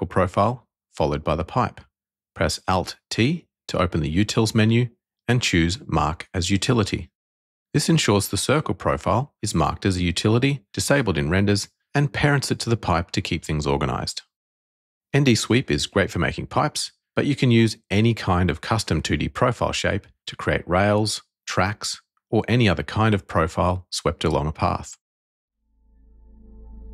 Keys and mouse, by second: 1.3 shift+click, 2.8 alt+t, 7.9 click, 9.5 click, 10.4-13.3 middle drag.